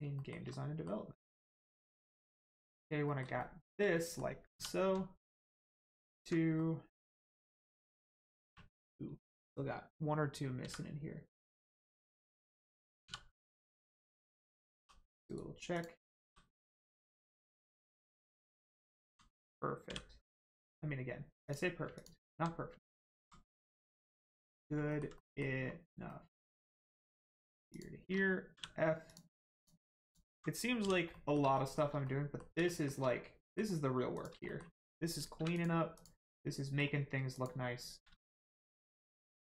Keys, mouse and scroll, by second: 0.1 shift+middle click, 0.5 middle click, 0.5 middle click, 3.1 middle click, 3.3 shift+middle click, 3.9 middle click, 4.0 middle click, 4.5 2, 5.8 alt+click, 6.5 middle click, 7.9-8.4 scroll up 1, 8.4 1, 9.2 click, 10.6 x, 11.3 click, 13.0 2, 13.7 click, 14.7 g, 15.3 right click, 15.7 click, 16.2 g, 16.7 right click, 17.5 scroll down 1, 18.5 alt+click, 20.2 middle click, 21.4 click, 21.9 alt+click, 22.8 alt+middle click, 23.8 middle click, 23.9 middle click, 24.8 alt+middle click, 25.1 middle click, 25.2 middle click, 25.6-26.0 scroll up 1, 26.0 alt+middle click, 26.9 click, 27.7 shift+click, 28.5 f, 29.0 click, 30.0 alt+click, 30.8 f, 31.1 middle click, 31.5 shift+middle click, 32.0 middle click, 32.1 middle click, 32.6 shift+middle click, 33.0 middle click, 33.1 middle click, 34.1 click, 34.4 shift+middle click, 35.5 click, 35.9 click, 36.2 middle click, 37.3 shift+click.